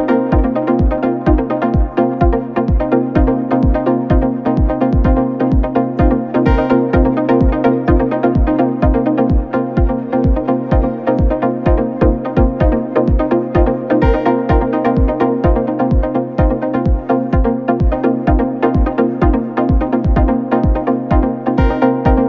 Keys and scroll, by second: 0.5 Up, 0.9 Up.